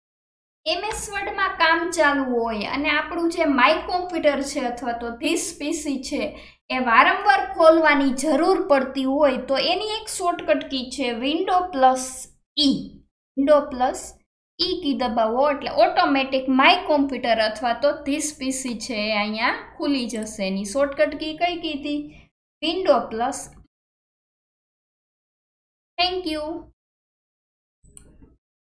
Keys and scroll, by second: 11.7 alt+KP_1, 14.4 super+e, 22.6 super+e, 28.6 super+e.